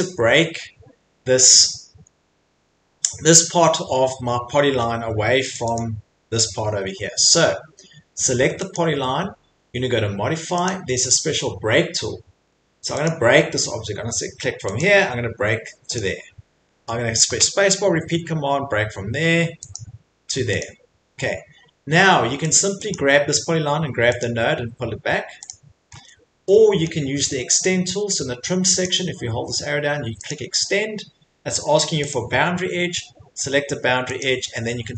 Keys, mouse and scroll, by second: 0.0 middle click, 0.8 middle click, 1.1 middle click, 1.2 middle click, 4.5 Escape, 4.9 middle click, 5.5 click, 5.8 click, 6.4 Escape, 6.6 middle click, 6.7 middle click, 8.7 click, 10.6 click, 13.1 click, 14.8 click, 15.9 click, 17.2 click, 19.7 click, 20.6 click, 21.5 middle click, 22.5 click, 22.9 click, 24.2 click, 25.5 click, 25.9 Escape, 25.9 middle click, 26.9 middle click, 28.8 click, 30.3 click, 31.9 click, 32.1 click, 34.2 click.